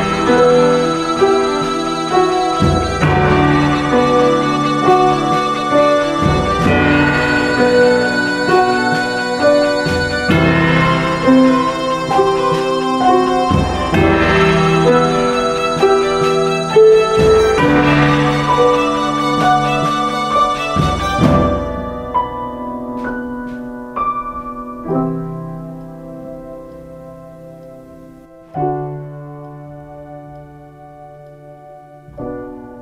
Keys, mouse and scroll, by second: 2.5 x, 12.0 ctrl+z, 12.7 ctrl+shift+z.